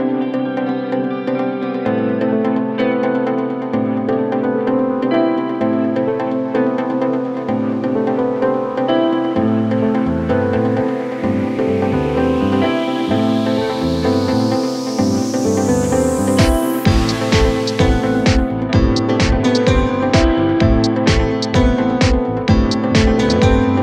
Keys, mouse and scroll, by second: 22.2 ctrl+t.